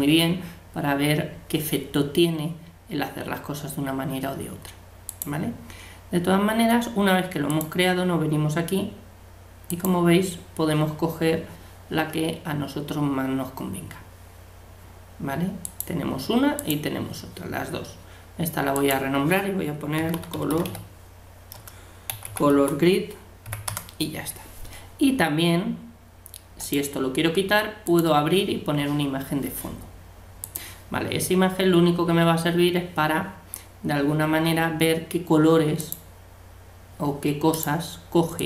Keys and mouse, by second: 5.1-7.0 drag, 7.5-9.5 drag, 15.6-17.4 drag, 18.7-20.5 drag, 26.6-28.0 drag, 30.5-32.3 drag, 32.3-35.8 middle drag, 35.8-37.6 drag, 38.4 click.